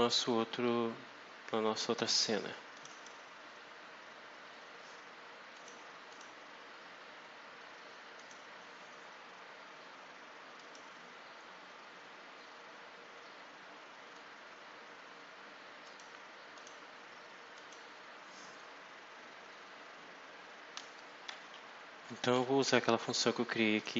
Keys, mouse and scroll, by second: 2.6 click, 5.4 click, 6.0 click, 8.1 click, 10.5 click, 15.8 click, 16.4 click, 17.4 click, 23.6 click.